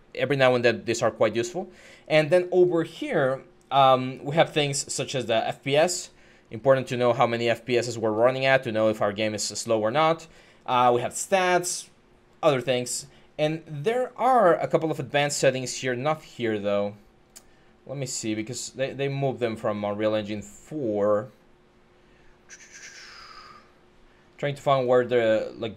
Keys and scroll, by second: 6.8-8.3 typing.